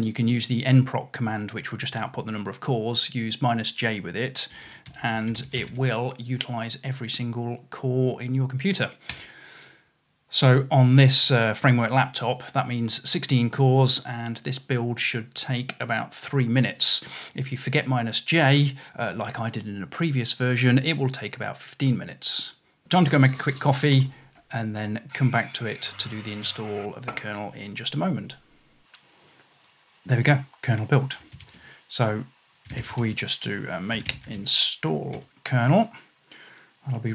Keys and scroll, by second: 4.3-6.2 typing, 8.9-9.7 typing, 12.0-12.8 typing, 16.7-17.4 typing, 22.8 typing, 26.2-26.5 typing, 28.0-28.4 typing, 30.9-35.9 typing.